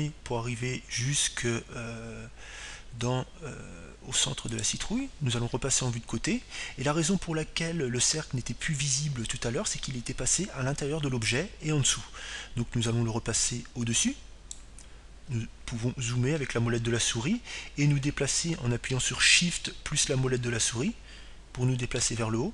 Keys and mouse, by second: 1.0 s, 7.3-9.1 drag, 8.5 KP_3, 15.6-17.3 drag, 22.4-22.5 middle drag.